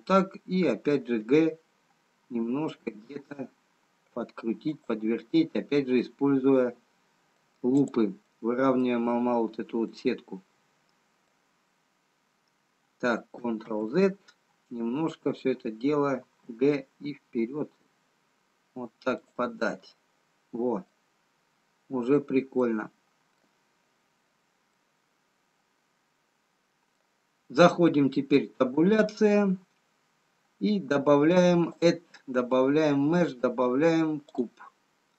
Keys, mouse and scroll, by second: 2.5 g, 6.5 middle click, 6.5-7.5 scroll down 2, 11.2 scroll up 1, 13.8 ctrl+z, 17.1 g, 19.9 middle click, 25.2 middle click, 25.2 scroll down 4, 28.9 Tab, 31.8 click.